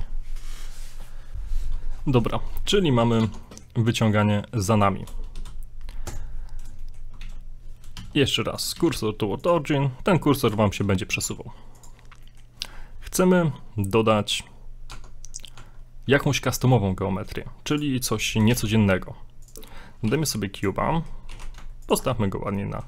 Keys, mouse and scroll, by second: 1.9 scroll down 1, 2.0 middle click, 2.8 shift+middle click, 3.2 shift+middle click, 3.2 Tab, 3.5 middle click, 4.1 middle click, 5.3 x, 6.4 scroll up 3, 6.8 shift+middle click, 7.0 shift+scroll down 1, 7.3 shift+a, 8.0 shift+s, 8.7 shift+a, 10.3 scroll up 2, 10.6 shift+middle click, 11.1 shift+middle click, 11.3 s, 12.2 middle click, 12.4 middle click, 12.4 scroll down 1, 14.9 Tab, 17.7 click, 18.5 shift+a, 19.7-20.1 scroll up 2, 20.1 g, 20.9 middle click, 21.3 g, 22.1 middle click.